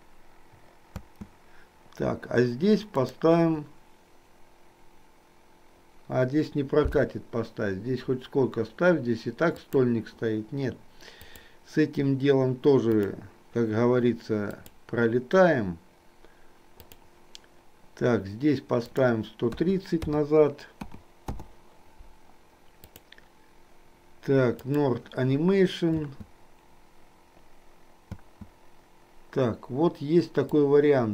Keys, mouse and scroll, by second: 1.1 space, 3.0-9.8 drag, 11.1-13.1 drag, 14.6-17.0 drag, 19.0-21.4 drag, 22.9-24.9 drag, 26.0 space, 30.6-31.1 drag.